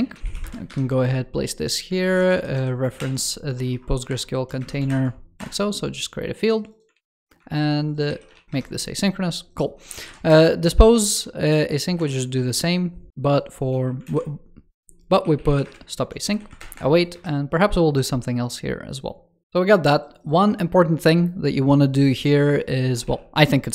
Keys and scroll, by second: 1.9 super+Left, 2.8 alt+BackSpace, 3.9 super+Return, 4.7 super+Return, 6.8 super+c, 7.9 ctrl+s, 13.9 super+Left, 16.4 super+Return.